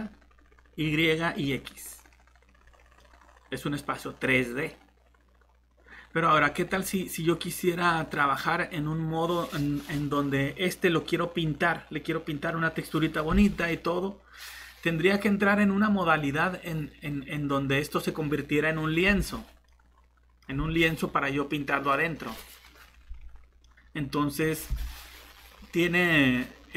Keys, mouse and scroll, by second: 3.0 middle click, 6.4 scroll down 1, 6.7 middle click, 7.8 scroll up 1, 19.7 middle click, 23.2-23.6 scroll down 1, 23.6 middle click.